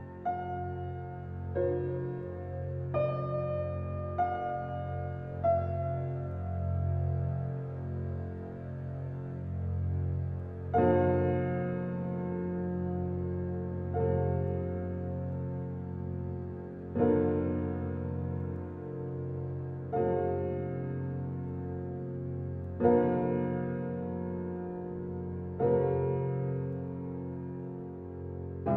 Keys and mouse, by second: 0.0-0.4 typing, 2.1 Escape, 2.7 ctrl+alt+click, 3.4-4.2 typing, 5.5 click, 6.2 typing, 7.1-8.5 alt+shift+drag, 10.7-11.7 drag, 11.8 click, 13.3 typing, 14.1 alt+shift+click, 14.9 ctrl+alt+click, 15.6 click, 16.7 ctrl+alt+shift+click, 17.5-19.8 ctrl+alt+drag, 21.0 click, 22.1 alt+click, 24.1 alt+click, 27.5 click.